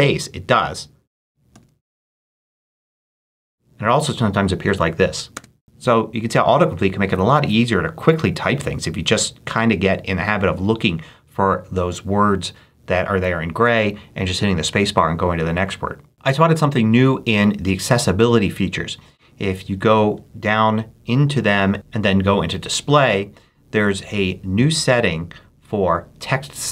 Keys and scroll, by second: 1.0-2.2 typing, 5.3 space.